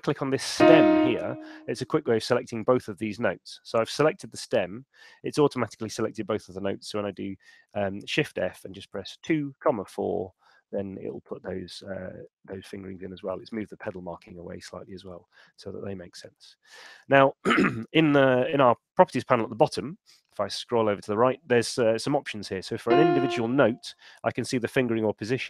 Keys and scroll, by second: 7.0 shift+f, 9.4 4, 10.2 Return, 18.7 super+8.